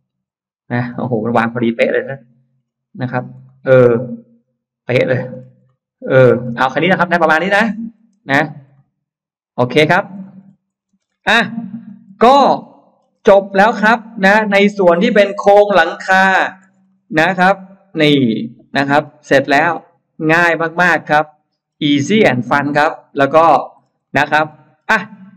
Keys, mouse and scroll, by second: 0.0-0.4 typing, 1.2 middle click, 1.4 scroll up 1, 1.9 scroll down 1, 2.5-3.5 scroll up 2, 3.3-4.7 middle drag, 5.1-5.6 scroll up 2, 5.6 middle click, 6.4-6.7 scroll down 2, 7.3 middle click, 7.3-8.1 scroll down 4, 8.6 middle click, 9.4-10.9 scroll down 3, 9.8 space, 10.0 middle click, 10.9-11.2 scroll up 1, 11.4 Escape, 11.7 Escape, 11.7-12.2 scroll up 1, 12.2 scroll down 1, 12.5 middle click, 13.0-13.8 scroll up 4, 13.8-15.4 middle drag, 15.4-16.9 scroll down 6, 16.2 middle click, 16.7 middle click, 17.1-17.9 scroll up 4, 18.1-19.1 scroll down 2, 19.1 middle click, 19.7-21.5 middle drag, 21.5-22.1 scroll down 4, 22.3 click, 23.3 click, 23.6-24.7 scroll down 2, 23.9 middle click, 24.4 middle click, 25.1 middle click.